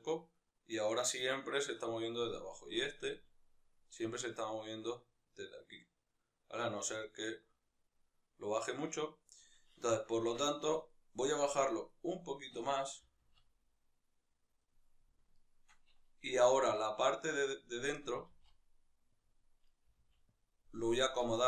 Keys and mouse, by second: 1.6 right click, 2.2-2.8 right drag, 2.8 g, 6.1 right click, 6.7 g, 8.3 right click, 10.1 Tab, 10.6-12.7 right drag, 12.7 g, 15.1 shift+right click, 16.2 g, 17.7 right click, 17.9 g, 19.4 right click, 19.6 g, 20.5 right click, 20.7 g, 21.2 click.